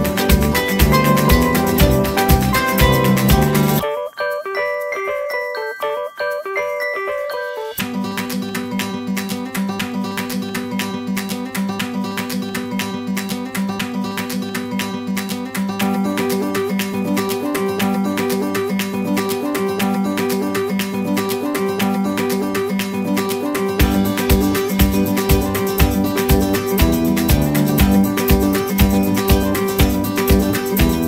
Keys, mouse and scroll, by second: 5.2 middle click, 8.7-10.1 scroll down 1, 10.1 middle click, 11.8 shift+middle click, 13.4 double click, 14.8 right click, 18.6-26.6 typing, 29.7 middle click.